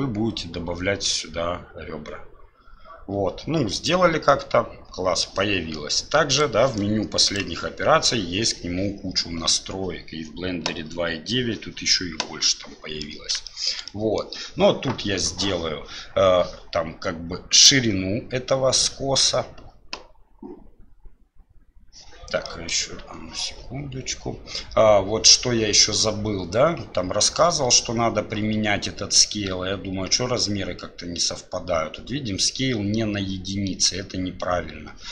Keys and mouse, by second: 4.3-5.3 drag, 7.3 click, 12.6 click, 13.5 shift+click, 13.9 click, 22.5 click, 23.0 Tab.